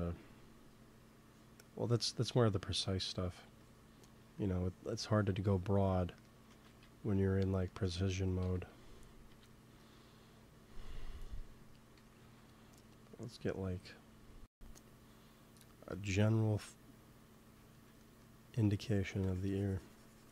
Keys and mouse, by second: 1.2-7.3 drag, 4.2 f, 6.6 ctrl+z, 8.3 KP_1, 9.2 KP_3, 11.9 g, 12.1 f, 12.3-17.7 drag, 17.7 middle click, 18.5 f, 19.4-20.3 drag.